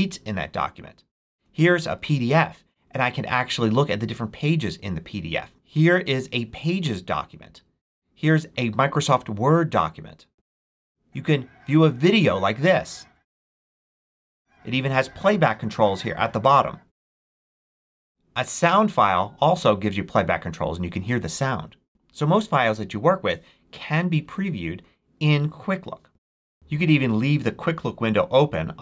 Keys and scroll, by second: 1.3 Up, 16.8 space, 17.7 space, 26.1 space.